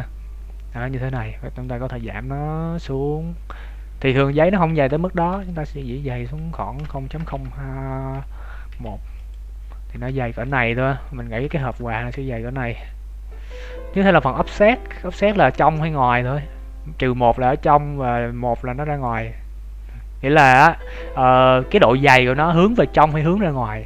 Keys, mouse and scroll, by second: 1.6 click, 9.6-10.2 scroll up 9, 10.4 shift+middle click, 11.0-11.4 scroll down 6, 11.6 shift+middle click, 11.8-12.2 scroll down 2, 12.1 middle click, 13.6 shift+middle click, 18.1 click.